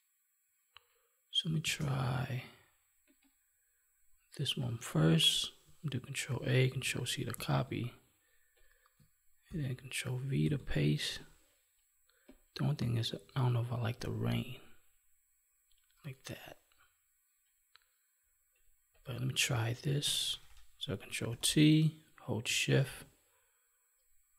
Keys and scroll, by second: 1.6 space, 6.2 ctrl+a, 7.3 ctrl+w, 9.4 ctrl+v, 19.9 ctrl+-.